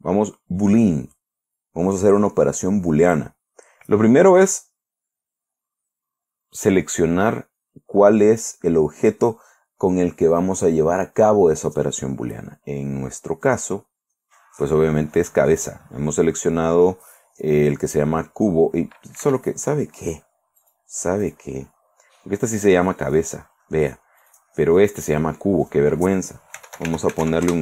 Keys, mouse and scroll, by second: 4.9 click, 13.9 click, 19.7 Escape, 21.1 right click, 21.7 right click, 23.6 click, 24.7 right click, 26.1 click, 26.8-27.6 typing.